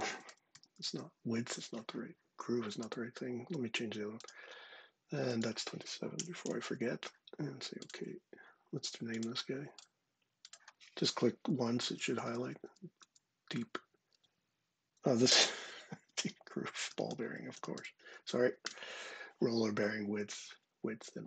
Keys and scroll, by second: 0.0-1.1 typing, 5.9 typing, 11.6-12.8 typing, 15.4 shift+g, 16.4-18.0 typing, 18.4 Return.